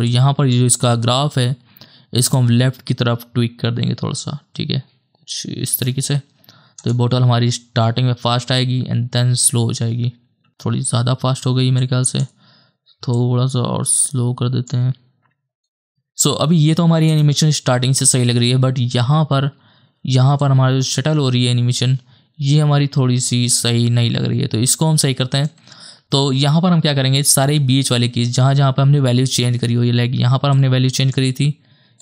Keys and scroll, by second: 10.5 space, 17.2 KP_0, 19.5 space.